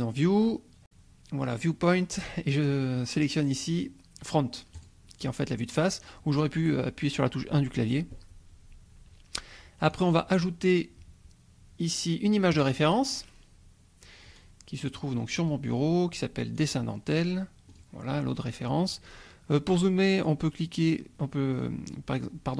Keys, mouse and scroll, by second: 4.7 click, 9.9-10.4 drag, 12.5 click, 14.9 click, 16.6 click, 17.7 click, 20.4-21.5 scroll up 4, 21.5-21.8 scroll down 2, 22.1 scroll up 2.